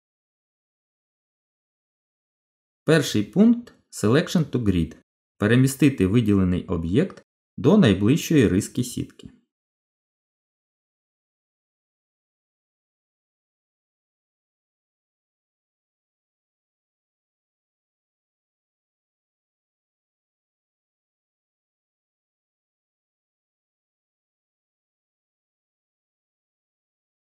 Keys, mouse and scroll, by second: 1.7 shift+s, 10.1 g, 15.6 shift+s, 19.2 g, 20.8 middle click, 22.0-23.0 scroll down 7, 23.0 middle click, 25.2 shift+s.